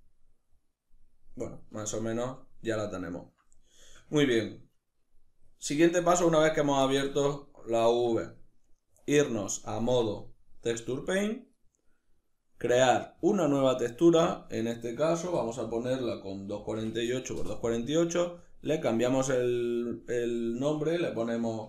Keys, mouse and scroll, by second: 5.6 Tab, 8.8 click, 9.6 Tab, 12.3-21.6 drag.